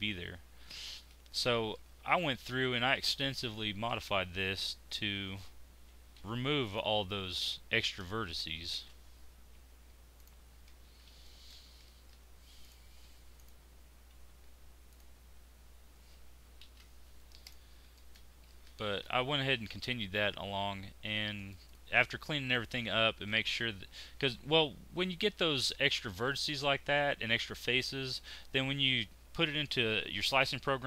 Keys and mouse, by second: 2.6 z, 6.2 alt+m, 8.7 alt+m, 10.8 z, 14.3 z, 15.8 z, 16.6 alt+m, 20.8 Tab, 21.7 middle click, 24.2 middle click.